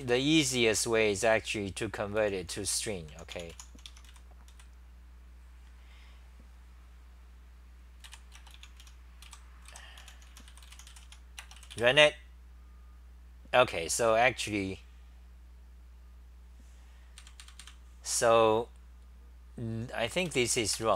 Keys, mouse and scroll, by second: 0.0 g, 2.0-4.5 typing, 4.1 Home, 8.1 ., 9.2-10.5 typing, 11.1 Home, 14.0 w, 20.3 super+=, 20.3 3.